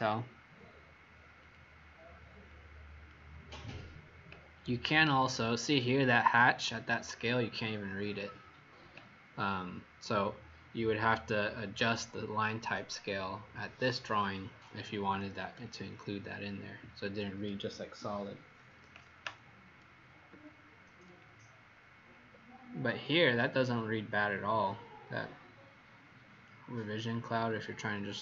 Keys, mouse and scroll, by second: 20.5 alt+scroll down 2, 21.5-22.0 alt+scroll down 2.